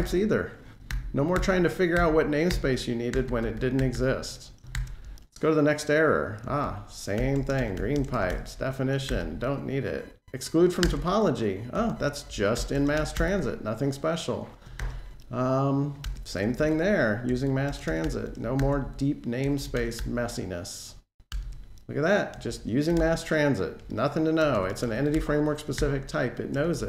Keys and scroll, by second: 0.7 alt+Page_Down, 7.5 Delete, 10.6 alt+Return, 13.7 Delete, 14.6 alt+shift+Page_Down, 15.8 alt+Return, 17.8 Delete, 18.4 alt+shift+Page_Down, 21.1 alt+Return, 22.8 super+e, 25.5 alt+shift+Page_Down.